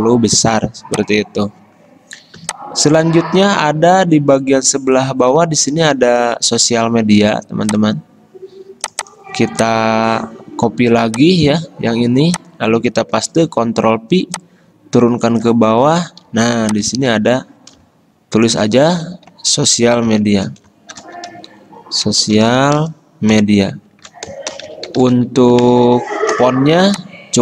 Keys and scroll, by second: 10.9 ctrl+c, 11.7 Escape, 13.5 ctrl+f, 16.5 t, 17.1 ctrl+a, 19.5 Left, 20.4 ctrl+shift+Right, 21.1-23.2 typing, 23.9 ctrl+shift+Right, 24.5-25.8 typing, 25.9 ctrl+a.